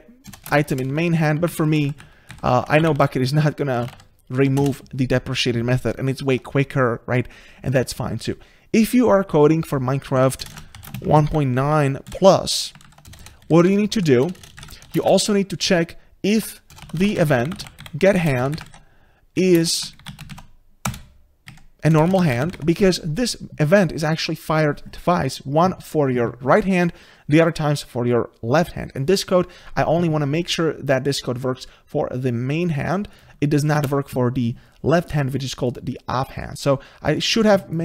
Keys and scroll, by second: 0.6 ctrl+space, 1.7 ctrl+shift+Left, 5.3 Return, 18.2 Return, 33.8 ctrl+space.